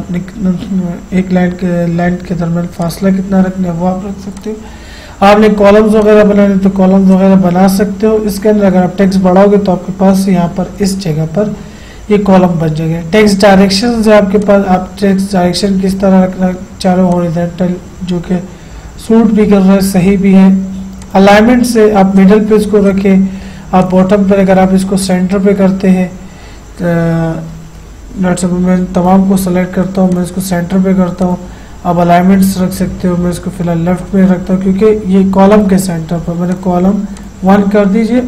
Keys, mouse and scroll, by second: 2.8 click, 14.4 click, 17.1 click, 21.1 click, 27.8 ctrl+z, 28.4-30.2 drag, 35.5 click, 35.6 click.